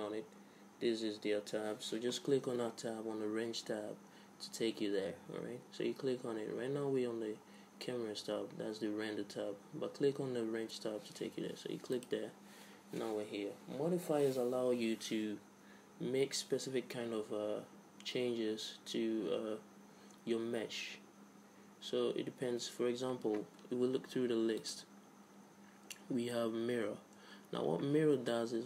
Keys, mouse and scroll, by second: 11.9-13.8 drag, 24.6-26.6 drag.